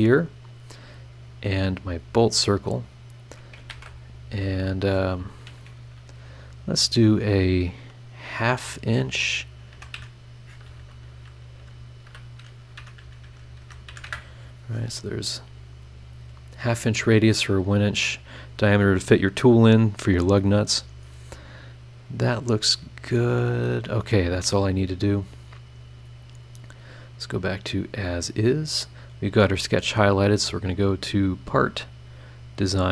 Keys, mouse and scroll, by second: 0.4 click, 1.3 click, 1.8 click, 2.8 click, 3.7 shift+r, 4.5 click, 9.7 KP_6, 9.9 KP_3, 10.0 KP_Decimal, 11.6 BackSpace, 12.8 KP_Decimal, 13.0 KP_3, 13.2 KP_5, 13.6 KP_Multiply, 13.9 KP_2, 14.0 KP_Enter, 17.6 scroll up 1, 20.6 scroll down 1, 24.1 click, 24.7 scroll down 1, 26.2 click, 27.4 click, 28.0 scroll down 1, 28.3-28.7 scroll up 1, 30.2 click, 31.7 click.